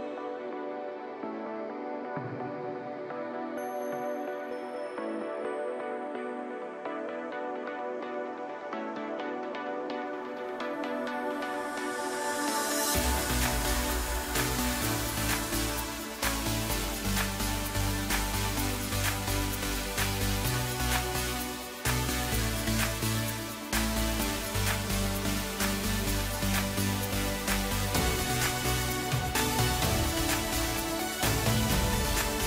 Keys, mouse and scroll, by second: 1.2 KP_1, 2.0-2.9 scroll up 1, 2.9 ctrl+a, 5.2 click, 7.5 click, 8.2-9.7 middle drag, 9.7 KP_1, 11.6-14.6 drag, 14.6 KP_Divide, 15.3-15.7 scroll down 1, 18.2-19.5 drag, 19.9-20.8 drag, 20.8 s, 22.3 Tab, 23.0-24.0 scroll down 1, 24.0 ctrl+r, 27.0 s, 29.0-29.8 scroll down 1, 29.8 KP_3, 30.8 Tab, 31.8-32.4 drag.